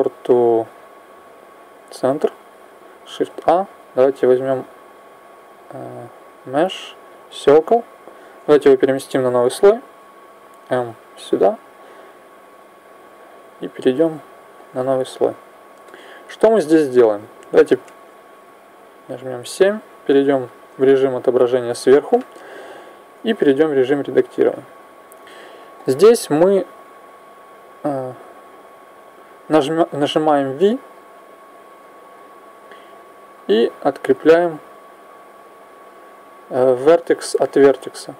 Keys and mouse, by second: 3.1 shift+a, 10.2 m, 13.7 click, 14.4-18.8 middle drag, 18.8 KP_7, 23.4 Tab, 26.8 right click, 31.6 v.